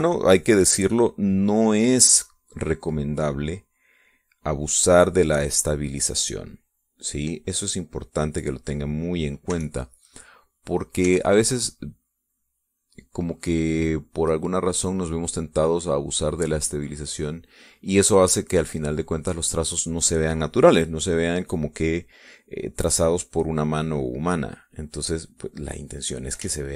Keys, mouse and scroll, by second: 0.2 click, 0.9 click, 1.3 click, 1.8 click, 2.8 click, 4.2-9.6 drag, 10.4 e, 10.6-11.8 drag, 11.9 e, 12.1-15.9 drag, 16.5-18.4 drag, 18.9-20.4 drag, 21.6-23.3 drag, 23.5-26.7 drag.